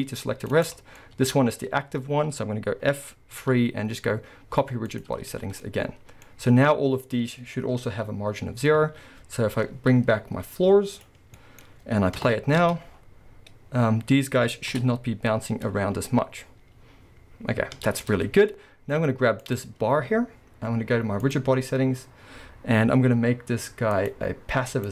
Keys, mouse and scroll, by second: 0.6 right click, 0.7 scroll up 2, 1.0-7.0 middle drag, 3.4 F3, 5.4-5.7 scroll down 2, 6.3-7.0 scroll up 2, 7.0 click, 8.5-8.9 scroll down 1, 8.9 alt+a, 10.9 click, 11.4-14.7 middle drag, 12.2 KP_0, 12.6 space, 12.9 scroll up 2, 16.3-19.4 middle drag, 17.8 space, 17.9-19.4 scroll down 2, 19.4 click, 21.3-24.9 drag.